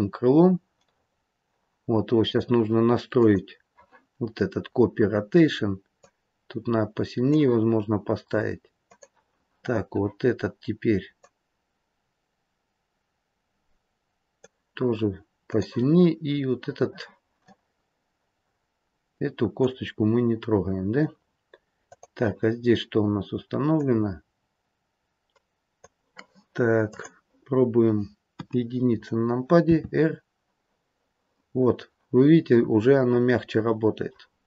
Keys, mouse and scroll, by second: 3.1 click, 4.5-5.9 scroll down 7, 5.9 click, 8.8 click, 15.4 click, 17.4 middle click, 21.7 click, 23.8 click, 26.8 click, 28.2 KP_1, 29.5 r.